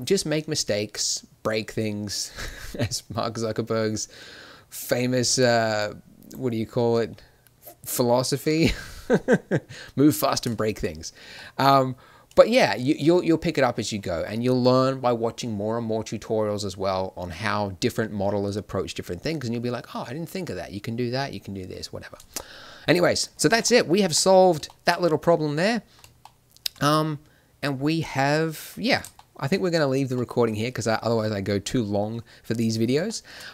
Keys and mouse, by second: 10.0 middle click, 10.5 middle click, 22.6 middle click, 23.4 Tab, 24.0 Tab, 28.8 middle click, 32.2 middle click.